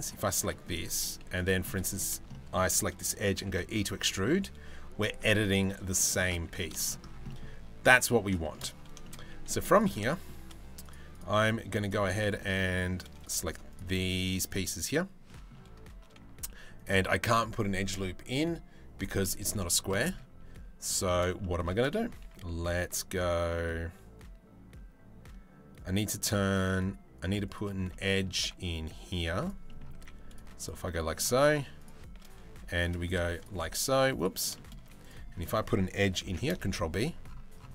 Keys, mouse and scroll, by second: 0.1 middle click, 0.5 3, 1.3 middle click, 1.9 shift+middle click, 3.1 e, 5.6 middle click, 6.1 ctrl+z, 6.4 shift+middle click, 6.9 middle click, 7.7 middle click, 8.0 shift+middle click, 8.6 shift+middle click, 9.2 3, 9.3 click, 9.7 shift+middle click, 11.8 middle click, 12.8 middle click, 13.4 shift+middle click, 14.9 shift+middle click, 16.0 ctrl+r, 19.3 shift+middle click, 20.5 middle click, 21.0 shift+middle click, 21.9 ctrl+r, 27.5 middle click, 28.8 z, 29.3 middle click, 29.6 1, 30.2 shift+middle click, 30.5 shift+middle click, 32.7 middle click, 34.2 middle click, 34.4 z, 35.9 ctrl+b.